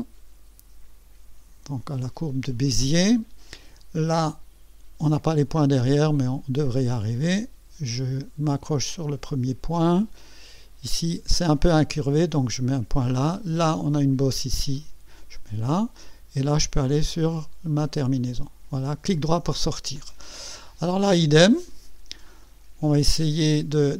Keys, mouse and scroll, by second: 8.9 click, 12.9 click, 14.7 click, 18.0 click, 19.2 right click, 20.2 scroll up 1, 20.8 right click, 22.4 right click, 23.7 click.